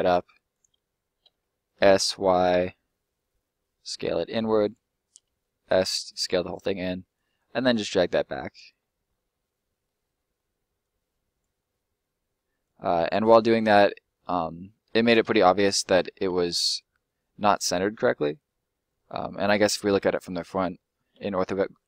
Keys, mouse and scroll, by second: 1.2 s, 1.9 y, 4.6 click, 5.0 s, 5.9 click, 6.2 middle click, 6.8 click, 8.7-9.2 scroll up 1, 9.2 middle click, 10.7 click, 11.5 middle click, 12.6 click, 13.3 middle click, 14.1 scroll down 1, 14.2 middle click, 15.4 ctrl+middle click, 15.5 ctrl+z, 16.0 ctrl+z, 16.5 middle click, 17.6 scroll down 1, 17.8 middle click, 20.0 1, 21.1 5.